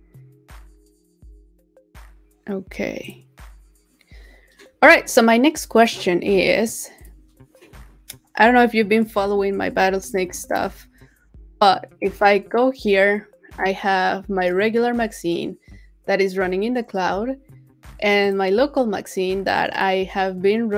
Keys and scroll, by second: 9.5 super+t.